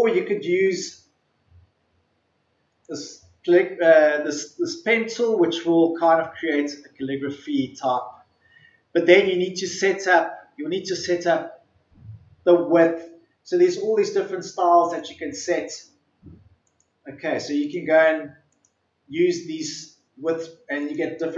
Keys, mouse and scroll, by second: 2.8-10.1 drag, 14.9-21.3 drag.